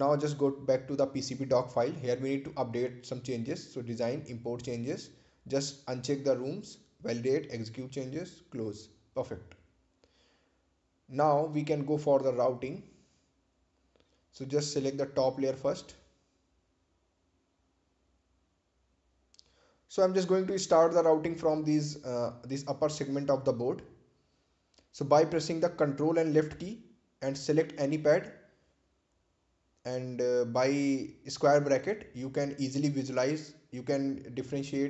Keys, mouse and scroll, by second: 1.4 click, 4.0 click, 9.0 click, 18.9 scroll up 1, 19.4-20.3 scroll down 1, 21.0-24.3 drag, 25.9 click, 28.9-30.8 typing, 34.2 click.